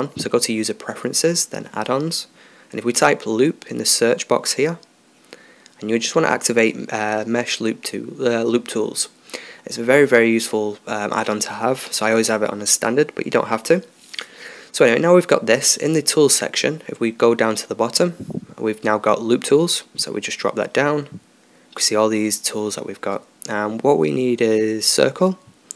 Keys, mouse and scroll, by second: 15.9-18.3 middle drag, 18.3-19.8 drag, 21.2-23.8 drag.